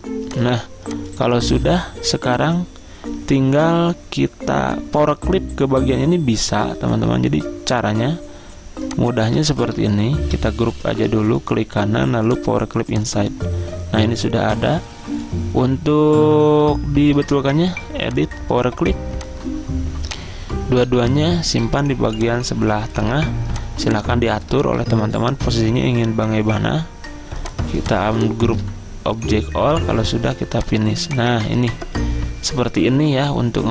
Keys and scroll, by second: 1.6 ctrl+z, 10.9 ctrl+g, 24.8 ctrl+z.